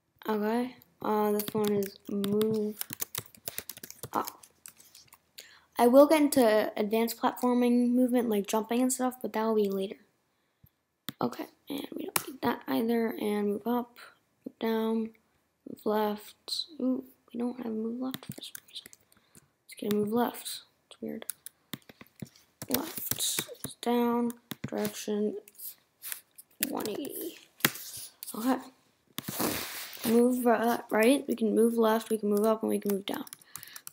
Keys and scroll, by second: 4.7 Return, 12.1 BackSpace, 24.4 Return, 26.8 1, 29.9 Right, 31.4 Left.